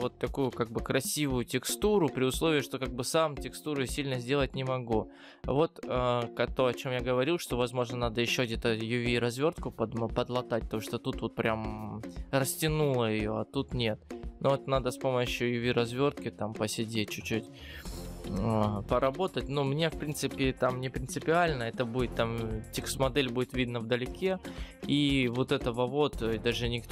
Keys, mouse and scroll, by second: 0.6-1.7 scroll down 8, 1.7-2.0 scroll up 3, 2.7 scroll up 1, 4.7-5.4 scroll down 5, 5.4 scroll up 1, 6.0 scroll up 3, 6.9 scroll down 1, 9.0-9.6 scroll down 3, 9.6-10.6 scroll up 2, 15.8-19.3 scroll down 10, 24.3-25.1 scroll up 10, 25.4 scroll down 4, 26.1 scroll up 1.